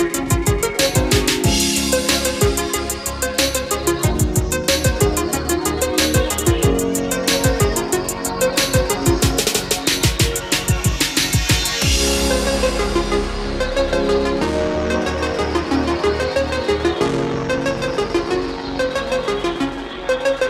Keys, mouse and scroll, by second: 0.4-0.8 scroll down 1, 2.6-4.5 drag, 5.6 Escape, 6.9 click, 8.3 ctrl+click, 9.2 ctrl+click, 10.1 click, 16.3 KP_5, 17.9-18.3 scroll down 1, 18.9 scroll up 1, 20.3 click.